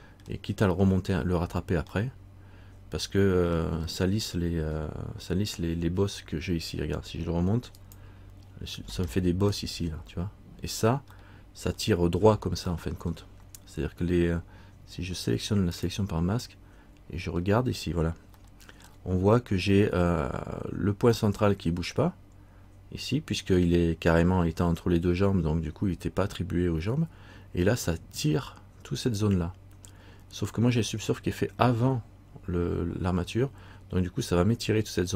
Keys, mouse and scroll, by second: 2.2 middle click, 4.1 middle click, 4.9-5.2 scroll up 1, 7.3 scroll up 1, 7.9 click, 9.2 middle click, 11.3 middle click, 12.9 middle click, 15.9 click, 17.5-18.5 scroll up 1, 18.6 shift+middle click, 19.4-20.7 scroll up 1.